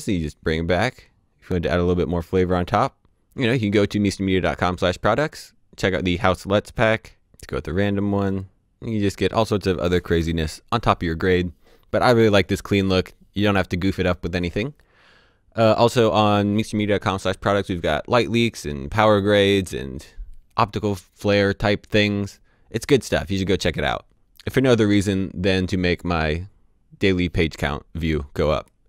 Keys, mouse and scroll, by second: 4.8 right click, 7.3 click, 10.1 Delete.